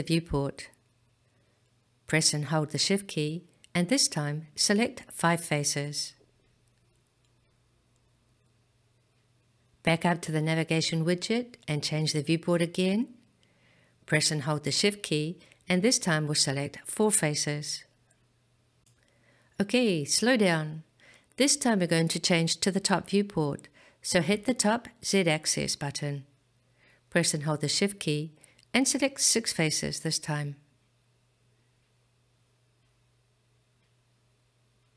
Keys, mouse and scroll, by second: 5.1 shift+click, 5.8 shift+click, 6.4 shift+click, 7.8 shift+click, 11.9 click, 16.8 shift+click, 17.5 shift+click, 18.2 shift+click, 18.8 shift+click, 25.8 click, 27.8 shift+click, 28.5 click, 29.5 shift+click, 30.2 shift+click, 31.1 shift+click, 31.6 shift+click, 32.3 shift+click, 33.1 shift+click.